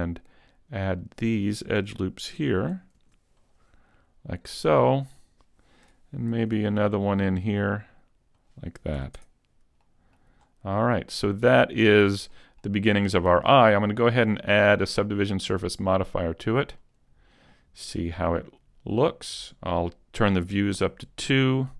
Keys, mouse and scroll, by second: 1.1 click, 3.0 ctrl+r, 5.3 click, 6.3 ctrl+r, 8.5 click, 9.0 a, 9.2 Tab, 10.4 middle click, 10.4-10.9 scroll down 3, 10.9 middle click, 10.9-11.7 scroll down 2, 11.8 shift+middle click, 12.3 middle click, 14.9 click, 18.9 click.